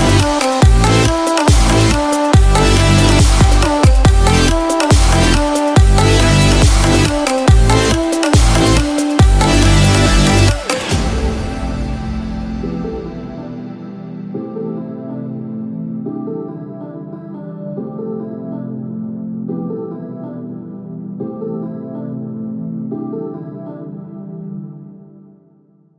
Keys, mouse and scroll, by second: 0.3 shift+d, 4.5 scroll down 1, 5.4 shift+middle click, 8.7 shift+r, 9.0 shift+r, 10.2-10.7 scroll down 1, 10.7 scroll up 1, 11.4-12.4 scroll up 1, 12.4 shift+middle click, 13.4 click, 17.1 shift+middle click, 17.5 scroll up 1, 17.9 click, 19.3 r, 22.8 r, 25.8 scroll down 3.